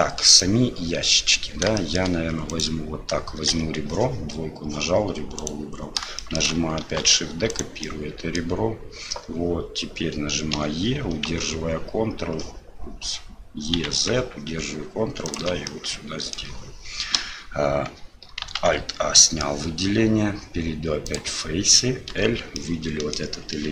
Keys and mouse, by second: 0.3 click, 1.7 shift+middle click, 2.5 right click, 5.4 right click, 6.2 shift+middle click, 6.8 shift+d, 7.8 click, 15.7 click, 17.1 l, 18.6 alt+a, 19.1 middle click, 21.0 click, 22.1 l, 22.7 click.